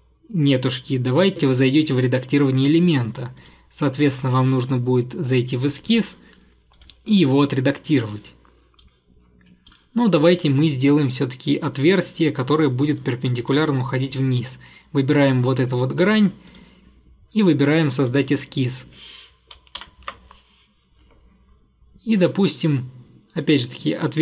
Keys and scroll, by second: 19.8 ctrl+8.